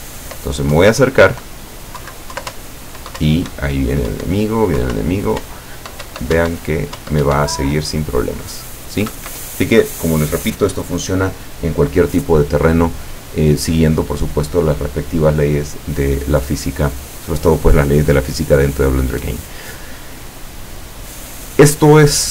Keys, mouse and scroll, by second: 2.5 Up, 4.8 Down, 5.5 Up, 9.2 Escape.